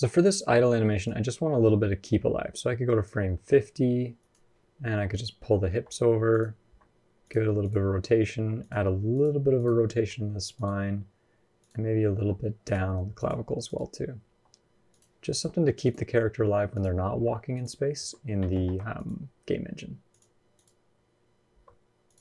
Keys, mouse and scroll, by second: 0.9 click, 3.1-4.0 scroll up 7, 3.1 middle click, 4.0 click, 4.9 click, 5.5 g, 6.5 r, 7.4 click, 8.1 r, 8.9 click, 9.4 click, 9.8 r, 11.4 click, 12.4 click, 13.5 click, 14.1 r, 15.6 click, 16.5 click, 16.9 r, 17.8 Escape, 18.3 ctrl+z, 18.8 click, 19.9 click, 21.3 r, 22.1-22.2 scroll down 5.